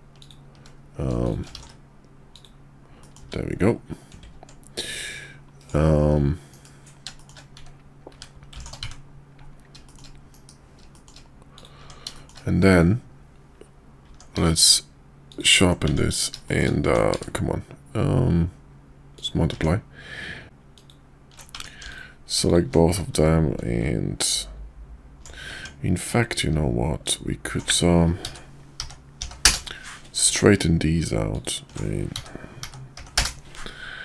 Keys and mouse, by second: 0.1 click, 1.2 click, 1.5 alt+x, 2.3 click, 3.0 middle drag, 5.6-5.9 right drag, 6.5 KP_5, 7.2 shift+middle click, 8.8 `, 9.8 middle click, 10.3 KP_5, 10.9 shift+middle click, 11.5 click, 11.8 Tab, 12.1 shift+middle click, 14.3 q, 15.8 Tab, 16.4 shift+middle click, 17.1 q, 19.5 Tab, 20.4 alt+Tab, 20.7 alt+click, 21.5 Tab, 21.9 alt+click, 22.4 alt+shift+click, 23.1 q, 25.5 Tab, 27.0 alt+click, 28.2 s, 31.3 alt+click, 32.1 s.